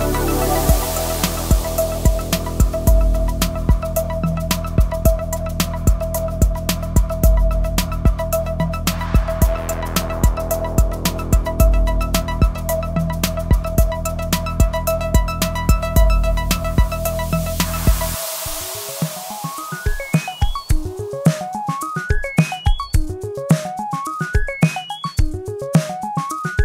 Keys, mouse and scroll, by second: 2.7 click, 8.5-17.5 drag, 20.7 ctrl+q, 20.9 F10, 21.3 scroll up 1, 21.8-22.3 scroll down 1, 22.6-25.0 drag, 25.7-26.6 drag.